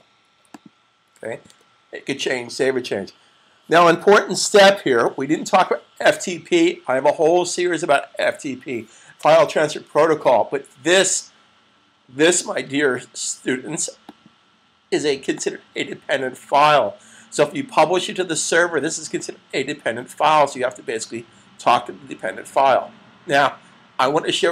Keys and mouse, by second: 1.3 super+s, 14.1 click.